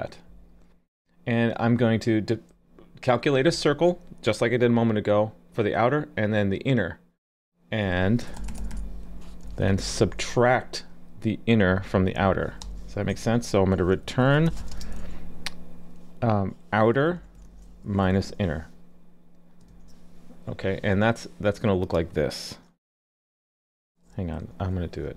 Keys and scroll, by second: 19.7 super+s.